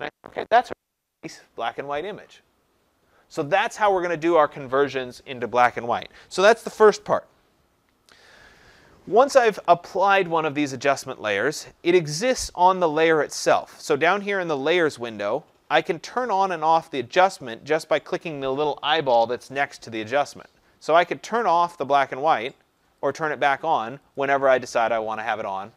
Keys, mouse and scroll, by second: 21.9 click, 23.1 click, 24.1 click.